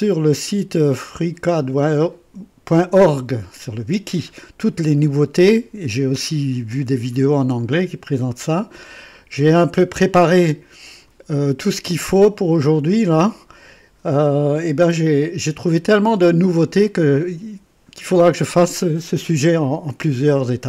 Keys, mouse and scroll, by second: 4.3-5.5 scroll down 6, 6.6-7.4 scroll down 4, 8.2-8.5 scroll down 2, 8.8-9.6 scroll up 4, 10.9 click.